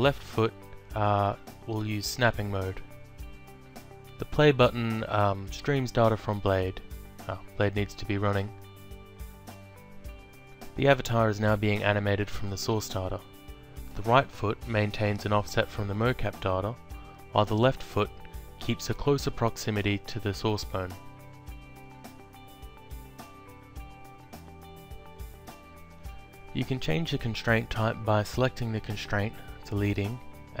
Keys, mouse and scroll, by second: 0.0 ctrl+click, 1.3 click, 3.8 click, 6.2 click, 7.8 click, 9.3 click, 15.6 ctrl+click, 20.3 ctrl+click, 21.1 alt+click, 25.6 click, 26.5 alt+click, 28.4 click, 29.4 click.